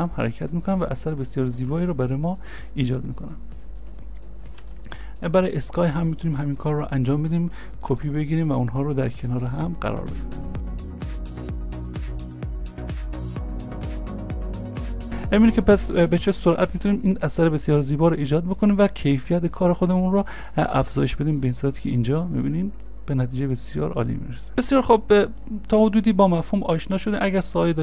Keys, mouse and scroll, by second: 4.7 c, 4.7 ctrl+z, 5.4 scroll down 1, 7.9 ctrl+d, 14.8-16.0 scroll up 1.